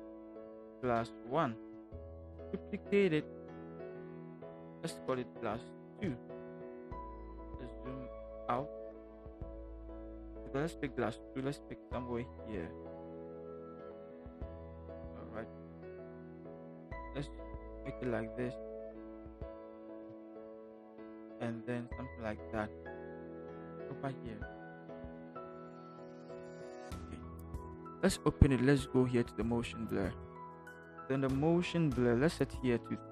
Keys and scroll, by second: 0.0-1.1 typing, 1.7 Return, 5.7 2, 5.9 Return, 7.3 ctrl+=, 8.5 ctrl+-, 8.8 ctrl+-, 8.9 ctrl+-, 9.1 ctrl+-, 10.8 v, 15.5 ctrl+t, 20.0 shift+Return, 20.7 shift+v.